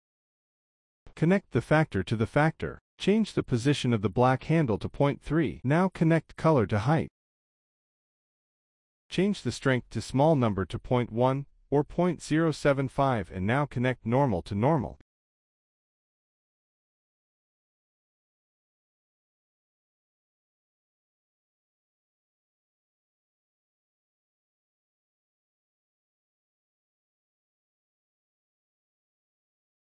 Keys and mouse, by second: 0.6 shift+a, 2.7-3.5 drag, 3.8 middle click, 4.7-5.4 drag, 5.7 click, 7.1 middle click, 7.6 click, 8.2-9.0 drag, 9.3-10.4 drag, 11.2-13.0 drag, 13.9 click, 14.5 middle click, 15.6 click, 21.4 middle click, 22.9 drag, 23.2 click, 25.7 click, 26.4 middle drag, 26.6 drag, 27.5 g, 27.6 drag, 28.6 shift+a, 29.5 d.